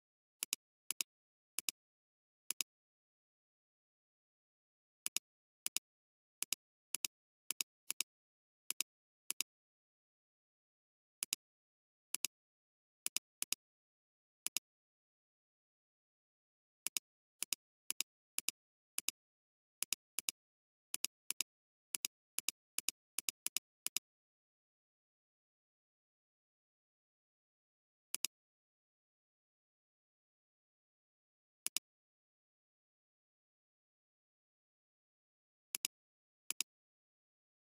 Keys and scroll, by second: 0.9 space, 12.1 space, 16.5 typing, 18.5 space, 20.4 space, 31.8 space, 32.3 alt+space, 35.6 alt+space, 36.4 space, 36.9 space.